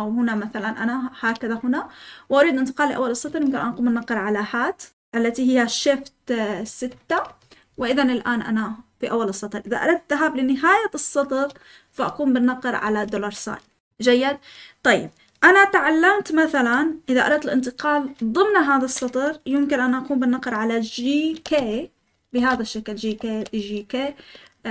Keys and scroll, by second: 0.0-1.6 typing, 21.2-24.7 typing.